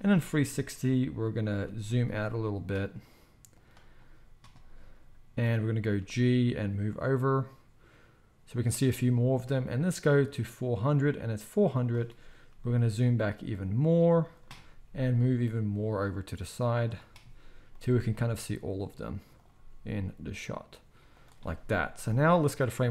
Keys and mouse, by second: 1.6 g, 3.6-9.9 right drag, 6.0 g, 9.9-14.3 middle drag, 11.8-14.3 drag, 11.8-22.9 right drag, 12.5 g, 14.9 g, 17.6 g, 19.5 g, 22.3-22.9 drag, 22.3-22.9 middle drag.